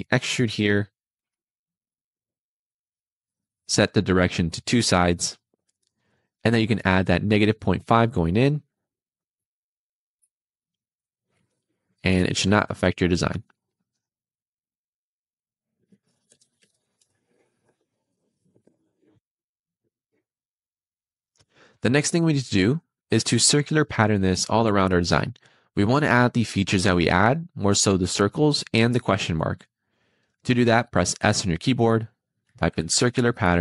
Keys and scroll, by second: 9.0 -, 9.4 ., 10.0 5, 12.2 BackSpace, 13.1 5, 16.3 BackSpace, 16.5 ., 16.9 5, 31.1 s.